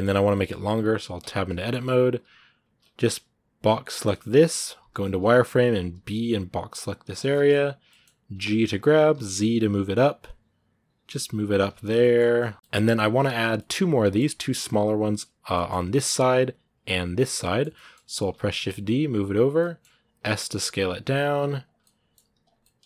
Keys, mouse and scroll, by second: 1.0 Tab, 1.3 shift+middle click, 1.5-1.9 shift+scroll up 2, 1.9 z, 6.9 scroll down 2, 7.1-8.1 shift+middle drag, 8.1 g, 11.7 scroll down 2, 11.8 middle click, 12.0 Tab, 12.2-16.2 middle drag, 16.2 click, 17.0 click, 17.2 middle click, 18.0 shift+d, 19.4 middle click, 19.9 s, 21.6 middle click, 22.0 g, 22.4-22.8 middle drag.